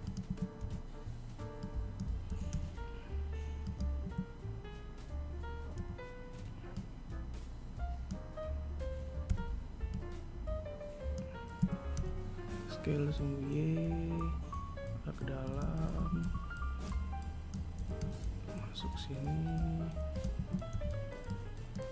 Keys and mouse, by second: 0.4 a, 9.4 b, 15.9 a, 20.8 b.